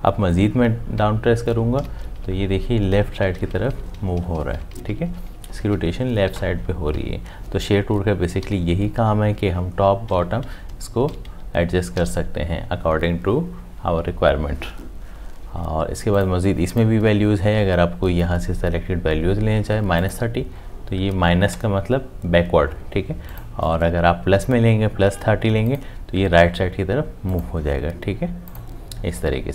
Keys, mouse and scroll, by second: 1.0 Down, 8.4 Up, 11.9 Down.